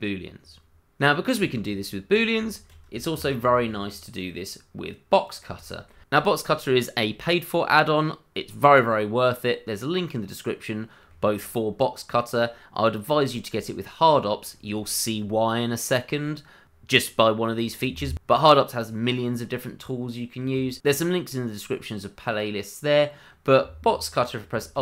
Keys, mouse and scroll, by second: 1.1 scroll down 1, 1.4 shift+middle click, 2.1 click, 2.5 middle click, 2.6 shift+middle click, 3.1 shift+d, 5.2 click, 5.6 shift+middle click, 5.7 middle click, 5.8 shift+middle click, 5.9-6.4 scroll up 2, 6.0 middle click, 6.4 middle click, 6.6 shift+middle click, 7.1 middle click, 8.7 middle click, 12.2-13.5 scroll up 1, 13.6 shift+middle click, 14.4 middle click, 22.2 middle click, 24.7 alt+w.